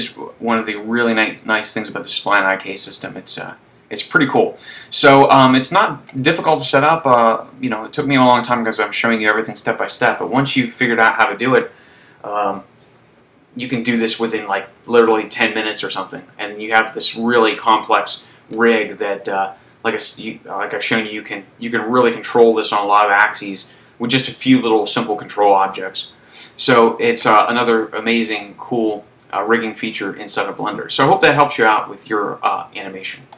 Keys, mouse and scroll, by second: 0.9 right click, 2.2 click, 6.1 right click, 7.3 click, 10.3 middle click, 17.5 middle click, 19.6 click, 28.5 right click, 29.4 click.